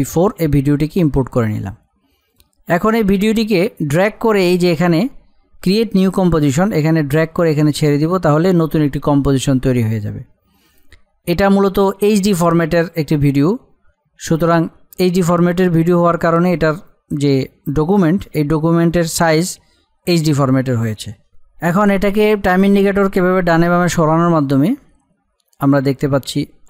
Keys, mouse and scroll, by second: 2.3 click, 4.9 typing, 6.9-11.3 drag, 6.9 typing.